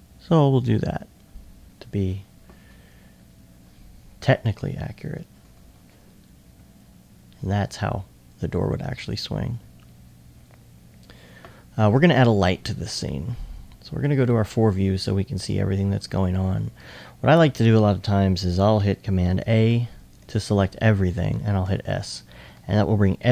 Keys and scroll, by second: 5.1 s, 6.2-7.0 typing, 21.6 s.